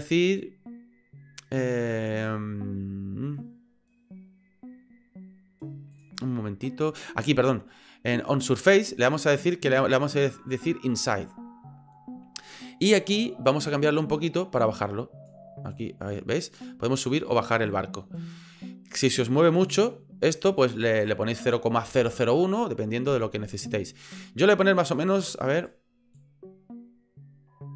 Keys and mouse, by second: 8.2-11.1 drag, 13.0 click, 14.0-15.4 drag, 15.7-20.3 drag, 21.0-25.7 drag, 26.1-27.7 drag.